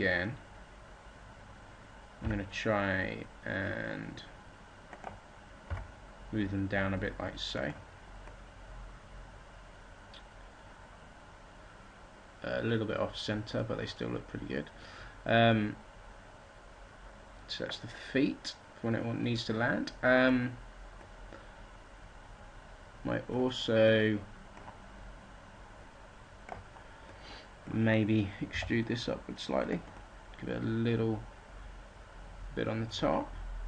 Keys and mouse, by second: 5.6 g, 7.6-8.7 drag, 9.3-12.3 middle drag, 21.0-25.6 middle drag, 25.9 b, 28.5 e, 30.9 click.